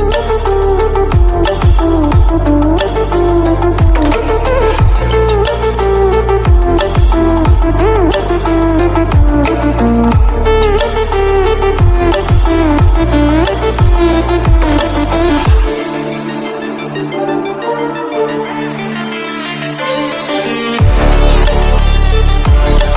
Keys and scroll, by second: 0.1 ctrl+0.